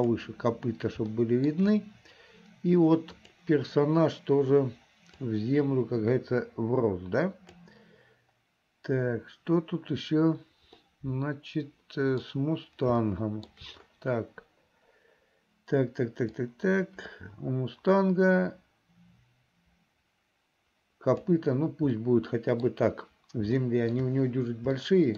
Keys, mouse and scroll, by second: 1.2 shift+middle click, 3.1 click, 5.4-7.7 drag, 10.8-12.3 middle drag, 13.1 shift+middle click, 16.4-21.3 drag, 22.0 middle click, 23.6 shift+middle click, 24.9 shift+middle click.